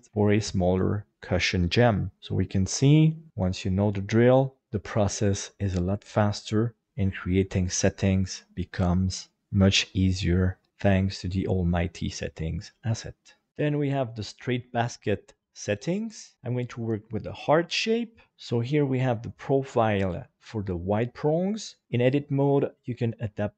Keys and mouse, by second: 2.2-4.6 middle drag, 18.3 KP_7, 19.2 right click, 21.8 Tab, 22.0 shift+middle click.